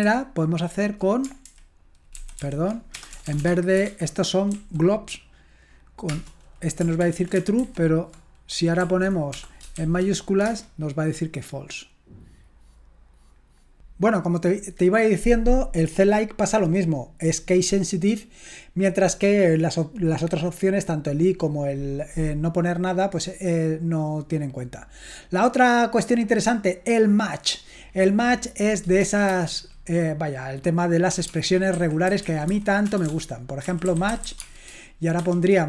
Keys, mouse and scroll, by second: 0.0 alt+b, 1.5 alt+b, 2.2 alt+f, 2.4 alt+f, 2.9-4.5 typing, 7.0 ctrl+p, 7.6 alt+b, 8.8 Right, 9.3 BackSpace, 9.8 shift+a, 10.5 Return, 24.2-25.1 scroll down 1, 25.1-25.8 scroll down 1, 29.3 shift+4, 31.0-35.2 typing.